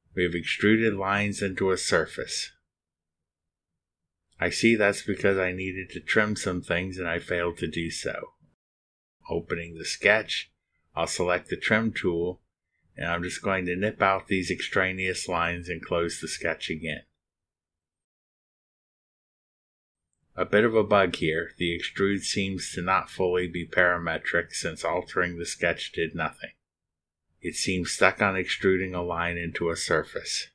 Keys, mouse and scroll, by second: 1.2 click, 2.8-8.3 middle drag, 2.9-9.2 drag, 9.4 click, 10.0 scroll up 2, 13.6 click, 14.8 drag, 16.0 click, 17.1 click, 18.2 click, 19.7 click, 22.5 click, 25.7 ctrl+r.